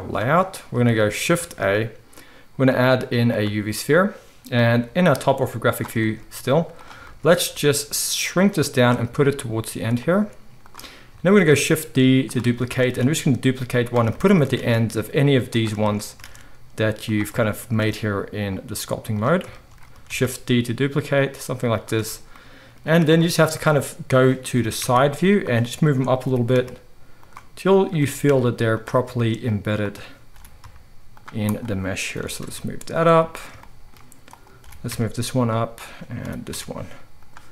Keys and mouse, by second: 1.3 shift+a, 4.7 g, 6.4 z, 7.4 s, 9.2 g, 10.1 s, 11.3 shift+d, 12.9 shift+d, 14.7 shift+d, 16.2 shift+d, 17.7 shift+d, 20.0 shift+d, 22.8 z, 24.5 g, 26.2 g, 27.6 click, 27.8-31.4 middle drag, 27.9 g, 30.3 g, 31.4 click, 31.5-37.5 middle drag, 32.1 g, 34.6 g, 36.2 g.